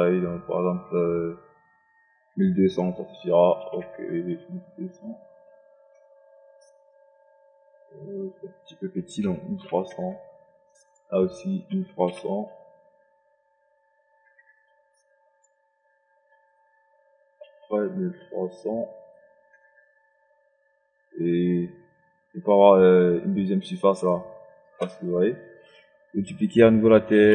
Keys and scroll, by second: 3.0 KP_1, 3.3 KP_2, 3.5 KP_0, 4.0 KP_1, 8.9 KP_1, 9.3 KP_3, 9.6 KP_0, 11.3 2, 11.8 3, 14.1 KP_0, 17.1 KP_1, 17.3 KP_2, 17.7 KP_3, 19.7 KP_0, 27.0 ctrl+d.